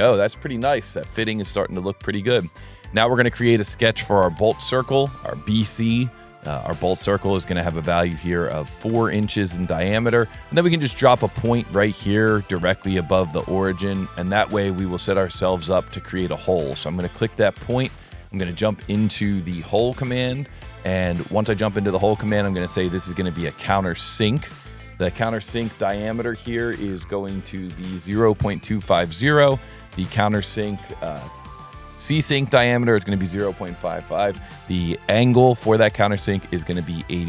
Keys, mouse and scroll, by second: 2.9 click, 3.1 s, 3.8 click, 4.7 s, 5.9 click, 7.0 click, 7.9 click, 9.4 scroll up 1, 9.7 scroll, 13.0 click, 15.5 click, 17.0 click, 18.6 click, 19.9 e, 21.0 click, 23.1 click, 24.5 click, 28.7 Tab, 29.0 Tab, 29.4 Tab, 30.0 Tab, 32.9 Tab, 34.6 Tab.